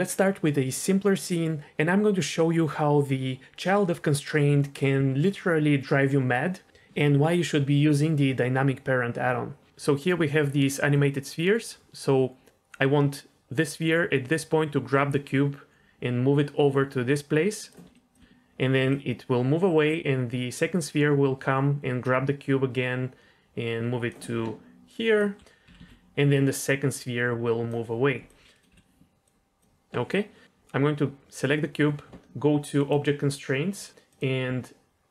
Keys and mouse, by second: 10.9-17.7 drag, 17.8 d, 17.9 click, 18.1 d, 18.9-24.1 drag, 18.9 d, 24.3 d, 24.8 d, 24.8 click, 25.2 d, 25.2 d, 25.7 ctrl+z, 26.3-27.7 drag, 28.2-28.6 drag, 28.7 Delete, 29.2 click, 32.8 click, 34.1-35.1 drag.